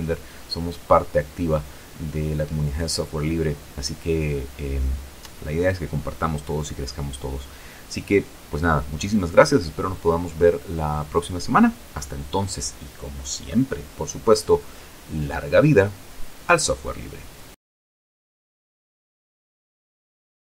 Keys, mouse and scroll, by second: 18.5 click.